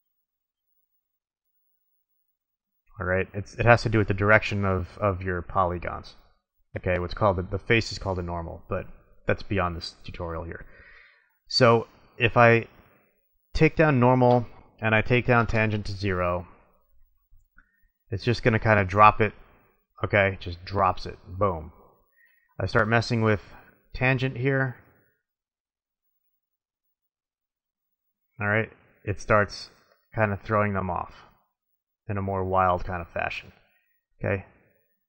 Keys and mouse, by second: 2.3 middle click, 2.5 middle click, 2.6 click, 2.7-4.1 middle drag, 13.3-16.6 drag, 16.8-19.2 drag, 23.8 click, 25.7-26.8 middle drag, 34.3 click.